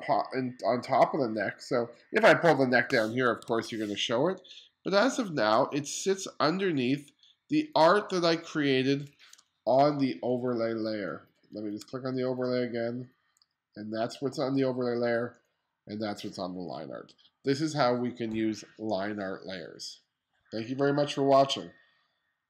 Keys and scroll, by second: 3.5 super+z, 9.4 space.